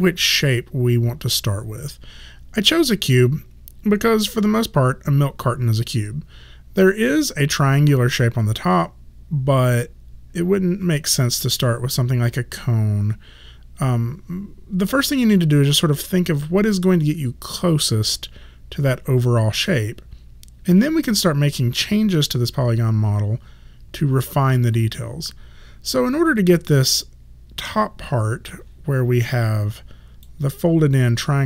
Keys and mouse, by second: 29.4 click.